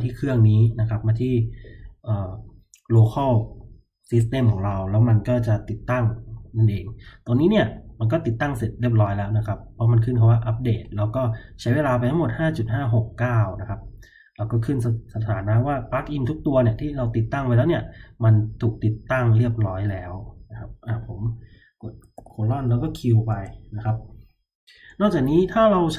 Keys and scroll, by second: 22.1-22.6 typing, 23.2 Return.